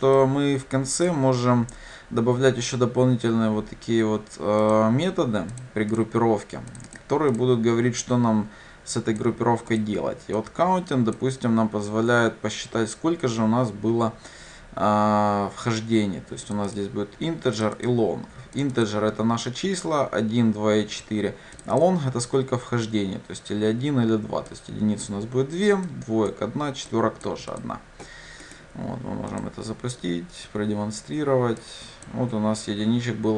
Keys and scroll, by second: 29.5 ctrl+shift+F10.